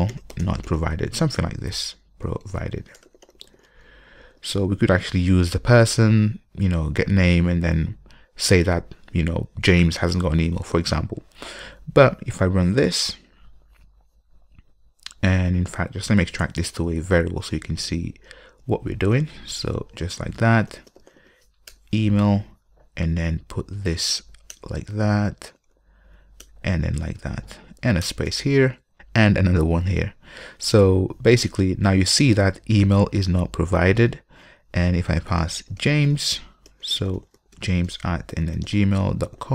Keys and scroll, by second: 13.5 ctrl+F5, 16.4 super+w, 19.4 alt+super+v.